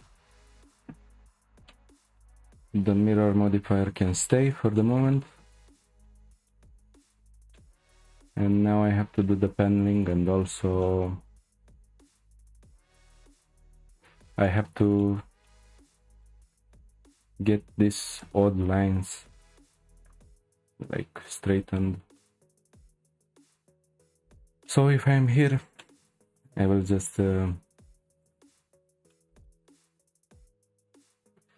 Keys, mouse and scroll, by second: 1.7-3.9 middle drag, 3.9-4.3 scroll down 2, 4.3-5.6 shift+middle drag, 5.6-6.0 scroll down 1, 6.0-8.7 shift+middle drag, 8.7-9.2 scroll up 2, 9.2-10.4 shift+middle drag, 10.4-10.8 scroll up 3, 10.8-12.3 shift+middle drag, 12.3-13.1 scroll up 2, 13.1-14.5 scroll up 1, 14.5 scroll up 1, 14.5-18.1 middle drag, 18.1 click, 21.3-21.7 scroll down 3, 21.7-23.0 shift+middle drag, 23.0 scroll down 2, 23.2-23.6 middle drag, 23.6 scroll up 1, 23.7-24.1 shift+middle drag, 24.1-24.6 scroll up 2, 24.6-25.5 middle drag, 25.5 Tab, 25.8-26.2 middle drag, 26.2 scroll down 1, 26.4 click, 27.9 Tab, 28.2 click, 28.5 Tab, 29.1-30.2 shift+middle drag, 30.2 scroll up 2.